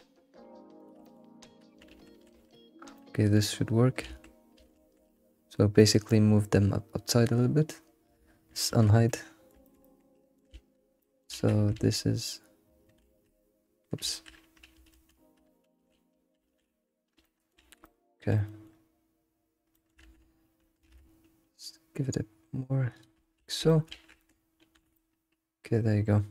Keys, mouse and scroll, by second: 1.0 middle click, 1.6 alt+middle click, 2.7 ctrl+shift+z, 2.7 scroll down 1, 3.1 middle click, 3.6-4.0 scroll up 3, 4.7 ctrl+shift+z, 5.8 middle click, 6.0-7.4 scroll up 2, 8.8 alt+h, 9.0 scroll up 1, 9.2-10.5 middle drag, 10.5 alt+shift+z, 11.0 middle click, 11.3 alt+shift+z, 12.0 ctrl+z, 13.0 alt+shift+z, 15.7 ctrl+z, 17.2 middle click, 17.8-20.0 middle drag, 20.0 ctrl+z, 21.0 alt+s, 23.2 scroll down 2, 23.4 alt+shift+z, 23.6 middle click, 24.7 alt+h, 24.9-26.3 middle drag.